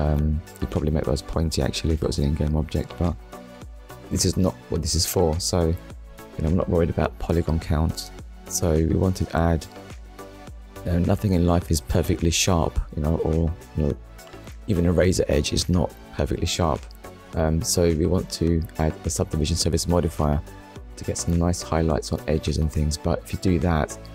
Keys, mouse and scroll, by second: 0.1 shift+middle click, 0.7 middle click, 1.6 ctrl+s.